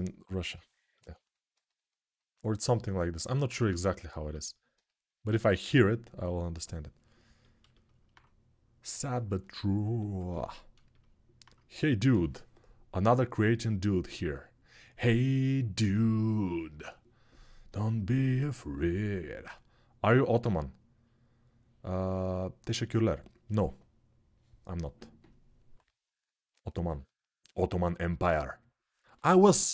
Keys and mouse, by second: 3.1 alt+q.